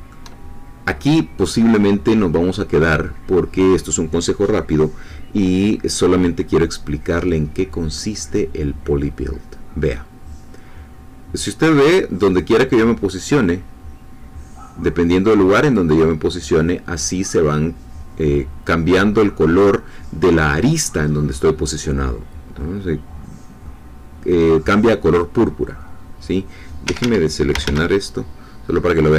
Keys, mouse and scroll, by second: 26.8 Escape, 27.5 a.